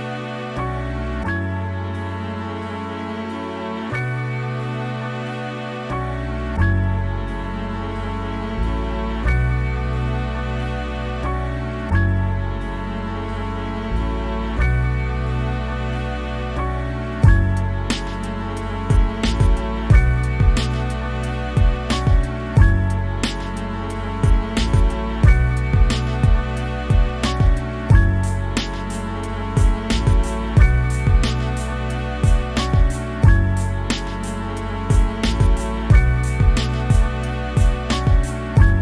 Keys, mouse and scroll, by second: 0.0 shift+middle click, 0.4 scroll up 1, 0.5 middle click, 1.0 click, 1.6-2.0 scroll down 4, 1.7 middle click, 2.0-3.9 shift+middle drag, 4.1 shift+middle click, 4.2 scroll up 3, 4.4 click, 5.0 scroll down 1, 5.3 click, 5.7 middle click, 6.2 click, 6.4 scroll down 1, 6.5-8.1 middle drag, 8.1 scroll up 2, 8.3 middle click, 9.2 scroll down 1, 9.3 shift+middle click, 9.6 click, 10.5 scroll down 2, 10.6 middle click, 11.3 scroll up 2, 12.1-13.4 middle drag, 13.4 scroll down 1, 14.0 middle click, 14.2-14.8 scroll up 3, 14.8 middle click, 15.4 scroll down 2, 15.5 shift+middle click, 15.7 click, 16.2 scroll down 1, 16.3 shift+middle click, 16.4 scroll up 1, 16.6-17.7 drag, 17.7 scroll down 2, 17.8 middle click, 18.2-18.6 scroll up 4, 18.3 shift+middle click, 18.6-19.9 middle drag, 20.0 scroll down 1, 20.1 middle click, 20.3 scroll up 1, 20.4 f, 20.6 f, 20.8 middle click, 20.9 scroll up 1, 21.0 click, 21.5 scroll down 1, 21.6 click, 22.1-23.3 shift+middle drag, 23.3-24.1 scroll down 1, 24.1 click, 24.3 middle click, 25.0 middle click, 26.0 scroll up 2, 26.2 click, 26.4 scroll down 1, 26.4 shift+middle click, 26.7 click, 27.0 middle click, 27.2 click, 27.4 shift+middle click, 27.8-29.1 middle drag, 29.3 shift+middle click, 29.6 scroll up 1, 29.7 click, 30.0 scroll down 1, 30.2 click, 30.5-31.6 middle drag, 31.6 click, 31.8 shift+middle click, 32.0 click, 32.3 middle click, 32.4 click, 33.3-34.3 middle drag, 34.3-35.0 scroll up 1, 35.0 middle click, 35.3 scroll up 1, 35.5 middle click, 35.7 click, 35.9 scroll down 1, 36.2 click, 36.6 scroll down 1, 36.8 shift+middle click, 36.9 scroll up 1, 37.0 middle click, 37.2-38.3 shift+drag, 38.3 scroll down 2, 38.4 shift+middle click.